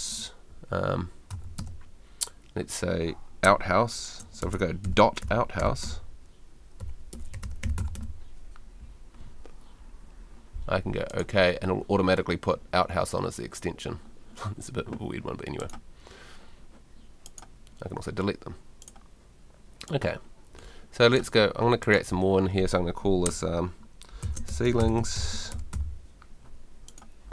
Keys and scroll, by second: 0.0-0.1 typing, 1.3 s, 1.6 space, 4.4-8.4 typing, 24.0-26.2 typing.